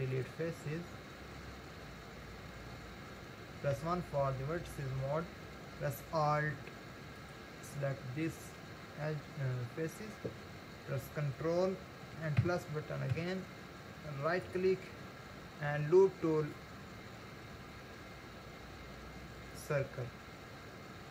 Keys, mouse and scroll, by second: 4.0 1, 7.1 alt+click, 12.4 ctrl+KP_Add, 13.2 ctrl+KP_Add, 14.4-17.5 right drag, 21.0 scroll down 2.